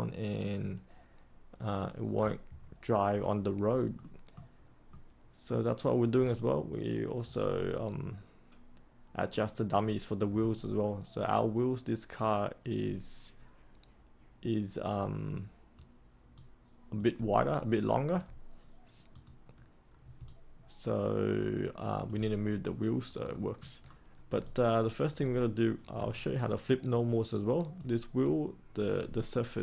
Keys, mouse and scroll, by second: 2.5-3.1 scroll up 1, 3.1-3.9 scroll down 1, 3.9 middle click, 6.3 alt+click, 10.6-17.1 alt+drag, 17.3 alt+click, 19.1 click, 20.2-22.0 alt+drag, 22.6-23.3 scroll up 1, 23.3 middle click, 23.7-24.2 scroll down 1, 24.4 alt+click, 26.1-27.7 alt+drag.